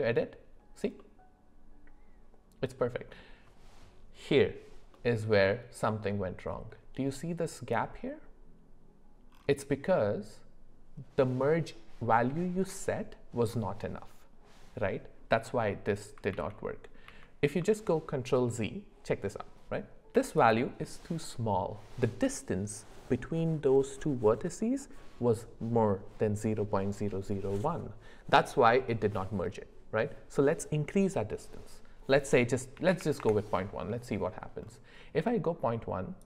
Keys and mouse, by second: 0.9-2.8 middle drag, 4.9-6.0 middle drag, 16.3 ctrl+z, 20.4-33.2 drag.